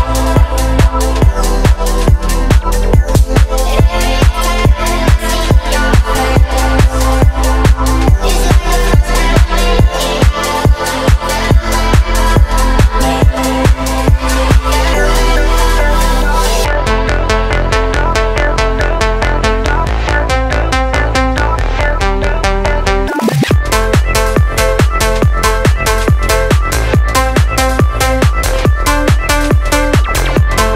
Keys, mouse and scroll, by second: 0.8-2.5 scroll up 2, 2.5 click, 4.7 click, 5.6 alt+click, 6.7 alt+click, 8.2 ctrl+b, 13.1 click, 14.1 click, 17.0 click, 17.6 ctrl+z, 18.9 click, 20.2 ctrl+b, 21.7-22.7 scroll up 2, 22.7 click, 23.0 Tab, 23.5-24.0 scroll down 2, 24.0-24.6 middle drag, 24.9-25.7 scroll down 2, 25.4 middle click, 25.9 scroll up 1, 26.3 shift+middle click, 26.6 scroll up 1, 27.8 click, 28.9 click, 29.4 KP_0.